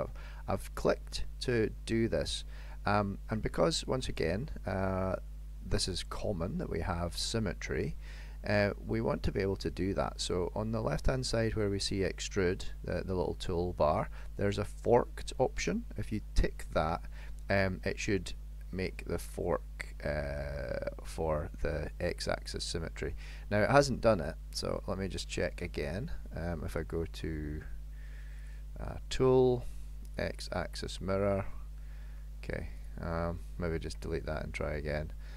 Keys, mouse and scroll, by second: 11.6 click, 15.7 click, 24.7 click, 26.8 click, 28.4 click, 30.2 click, 31.3 middle click, 32.9 click, 33.9 Delete.